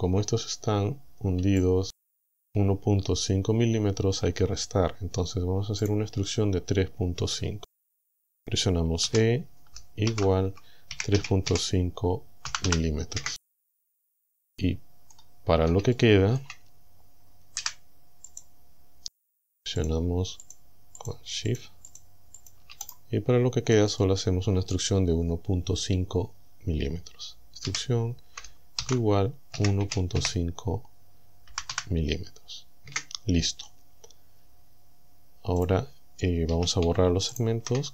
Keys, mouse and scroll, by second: 0.1-1.0 scroll up 4, 1.6 shift+click, 4.2-5.1 scroll down 4, 5.9 click, 9.1 e, 10.1 shift+0, 11.2 KP_Decimal, 11.5 KP_5, 12.5 m, 13.2 KP_Enter, 14.6 click, 15.5 scroll up 1, 16.0 shift+click, 16.7 shift+scroll up 1, 17.6 c, 18.3 click, 19.8 shift+click, 20.5 shift+click, 21.0 shift+click, 21.5 shift+click, 21.9 shift+click, 22.4 shift+click, 22.9 shift+right click, 23.2-23.6 shift+scroll down 3, 24.0 middle click, 27.7 e, 28.8 shift+0, 29.6 KP_1, 29.9 KP_Decimal, 30.2 KP_5, 31.5 m, 32.9 KP_Enter, 35.6 click, 36.6 a, 37.4 alt+shift+right click.